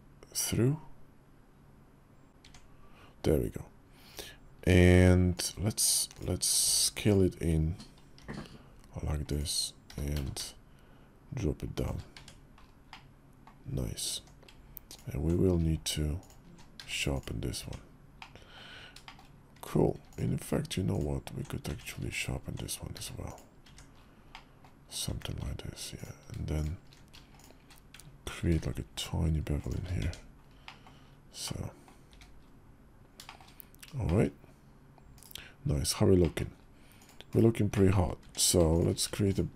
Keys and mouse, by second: 2.3 Tab, 5.1 click, 6.4 Tab, 6.8 click, 8.0 i, 9.6 g, 11.9 Tab, 12.6-13.2 middle drag, 13.9 Tab, 16.5 q, 17.4 Tab, 18.0 click, 18.8 shift+middle click, 19.4 Tab, 19.9-21.2 alt+drag, 21.4 Tab, 21.8 alt+click, 22.7 q, 23.4 Tab, 24.1 drag, 24.9 Tab, 25.7 alt+click, 26.3 alt+shift+click, 28.2 ctrl+b, 29.8 Tab, 30.4 click, 31.2-31.6 drag, 31.8 `, 33.0 shift+middle drag, 33.8 shift+click, 34.9 /, 36.0 click, 37.0 /, 37.5 click, 38.0 Tab.